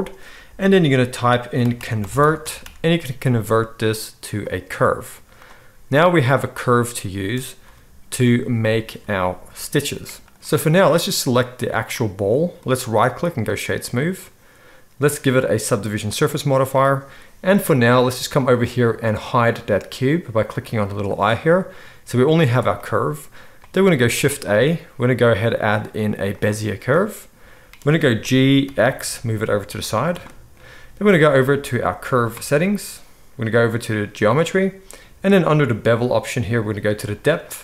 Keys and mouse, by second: 5.1 z, 7.6 g, 11.4 click, 11.9-12.9 middle drag, 12.9-34.2 right drag, 15.1-21.0 drag, 15.1-21.0 middle drag, 24.2 shift+a, 28.2 g, 34.2-37.6 middle drag.